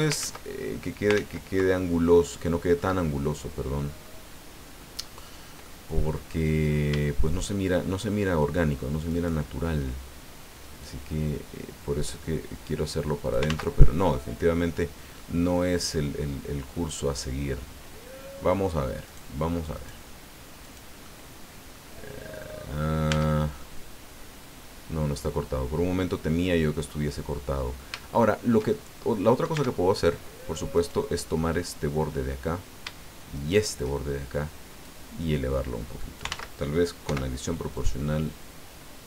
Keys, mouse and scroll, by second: 0.2 ctrl+shift+z, 1.1 ctrl+z, 1.7-3.0 ctrl+drag, 5.6 middle click, 9.1 shift+right click, 10.8-13.5 drag, 13.4 ctrl+z, 14.0-15.3 middle drag, 15.4-17.7 drag, 19.1 right click, 19.7 right click, 20.6 right click, 21.0 middle click, 22.4 middle click, 23.1 Tab, 23.6-26.9 middle drag, 27.8 shift+middle click, 28.0 shift+middle click, 29.1 middle click, 29.5 Tab, 30.7 right click, 31.5-32.6 middle drag, 33.3 shift+right click, 34.8-36.4 drag, 36.3 ctrl+z, 37.0 o, 37.7 click, 38.5-38.9 scroll down 1.